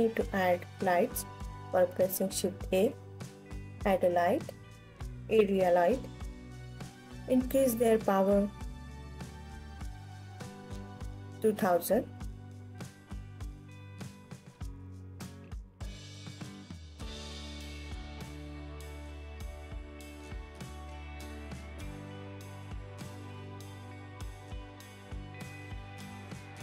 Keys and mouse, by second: 3.0 g, 4.7 click, 6.9-9.5 drag, 8.5 KP_0, 11.2 KP_3, 12.5 alt+middle drag, 12.7 alt+click, 12.7 alt+middle click, 12.9-13.7 alt+drag, 12.9 alt+middle click, 14.1 KP_7, 15.0 s, 16.1 click, 16.7-17.8 alt+drag, 18.5 g, 19.4 click, 19.7 KP_1, 20.5 g, 21.4 click, 22.0-22.6 alt+middle drag, 23.8 ctrl+s, 25.2 ctrl+s.